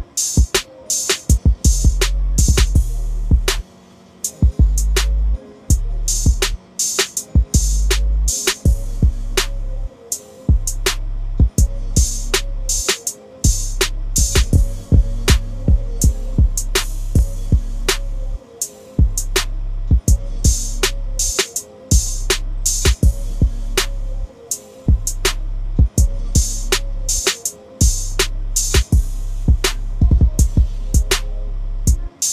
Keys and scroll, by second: 23.5 typing.